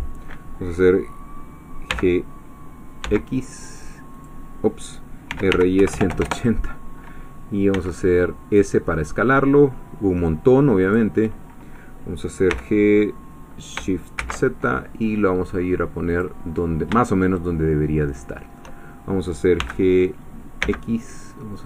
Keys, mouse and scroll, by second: 1.9 g, 3.0 x, 4.2 click, 5.1-6.1 typing, 6.2 Return, 7.7 s, 10.8 click, 12.5 g, 14.2 shift+z, 16.1 click, 16.6-17.0 scroll up 3, 17.0-18.7 shift+middle drag, 19.6 g, 20.6 x.